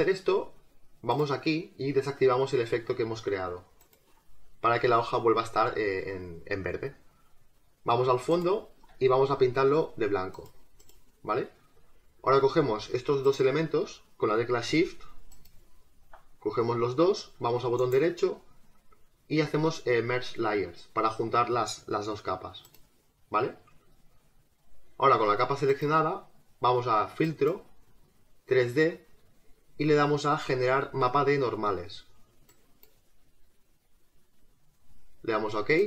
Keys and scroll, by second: 1.1 space, 9.2 g.